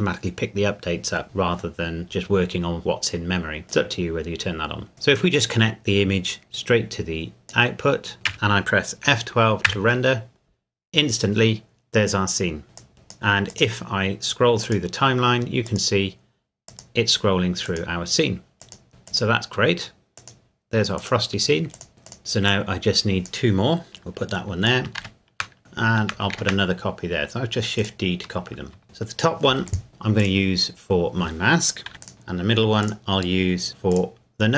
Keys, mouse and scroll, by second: 3.7 click, 5.3 click, 8.3 F11, 9.7 F12, 12.8 click, 22.2-22.5 scroll down 1, 22.5 click, 25.0 shift+d, 25.6 shift+middle click, 26.3 shift+d, 27.8 click, 28.8 shift+middle click, 29.7 click, 31.9 a, 32.0 click, 32.8 click.